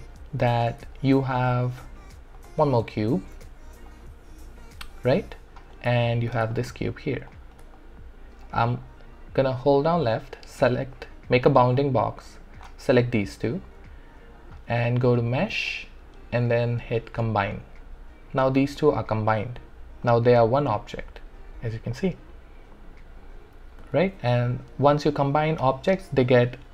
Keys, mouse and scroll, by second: 0.0 alt+middle click, 0.9 alt+middle click, 2.4 click, 2.7 shift+right click, 3.3 w, 3.9-6.2 drag, 7.8-9.8 alt+drag, 10.1 click, 15.7 click, 20.1-23.9 drag, 23.9 ctrl+z.